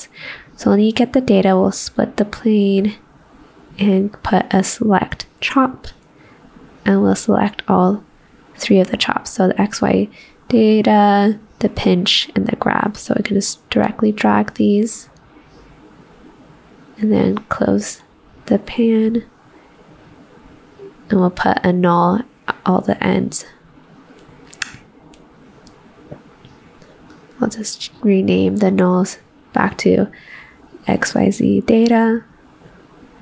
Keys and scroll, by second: 24.1 ctrl+c, 24.1 v, 31.8 ctrl+shift+d, 31.9-33.2 typing.